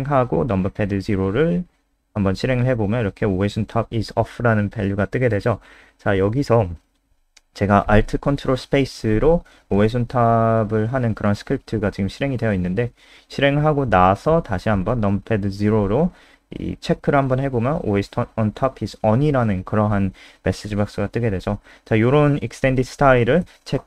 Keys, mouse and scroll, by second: 0.6 KP_0, 4.0 click, 7.2 ctrl+alt+space, 10.9 click, 17.2 KP_0, 19.9 click.